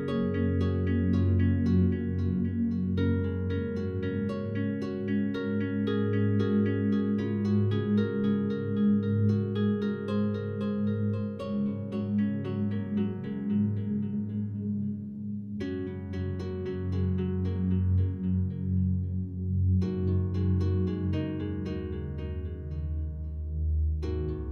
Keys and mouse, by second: 0.7-1.5 drag, 1.8-2.2 drag, 4.0 click, 4.5 drag, 5.8-6.7 drag, 8.3 click, 9.1 click, 13.4 click, 16.6 super+d, 16.6 click.